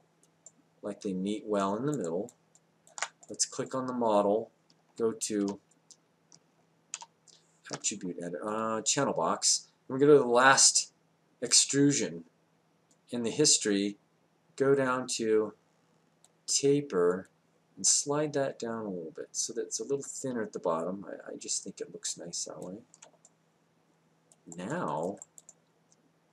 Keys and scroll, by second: 5.4 ctrl+a.